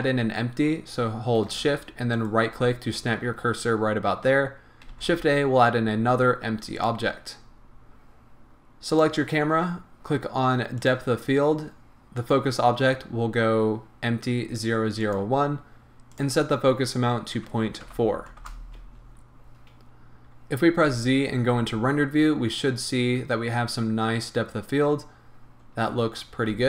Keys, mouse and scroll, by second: 2.2 shift+right click, 4.9 shift+a, 7.4 scroll down 1, 8.9 click, 10.8 click, 12.2-24.6 drag, 18.5 Return, 19.8-20.8 scroll up 2, 20.8 z, 26.5 z.